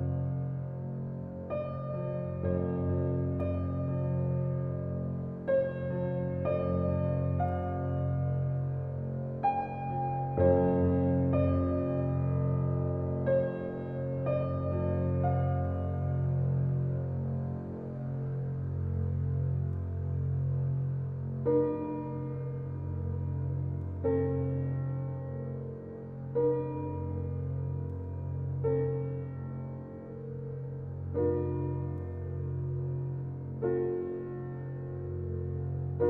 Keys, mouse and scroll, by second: 0.0 right click, 0.6-2.5 drag, 3.2 alt+click, 9.2 scroll down 2, 9.5-10.8 middle drag, 10.8 scroll up 1, 11.0 shift+middle click, 11.8 alt+click, 12.9 alt+shift+click, 13.5-14.7 middle drag, 14.7 alt+shift+click, 15.3-16.6 middle drag, 16.6 alt+shift+click, 17.2 shift+middle click, 17.5-17.8 scroll up 1, 17.8-21.5 shift+middle drag, 21.5 scroll down 3, 21.8 click, 22.6 middle click, 23.7-27.0 shift+middle drag, 27.0 click, 28.2 click, 29.1-32.6 drag, 32.6 alt+z, 33.4 scroll up 3, 33.7 shift+middle click, 34.2 Tab, 35.2 click.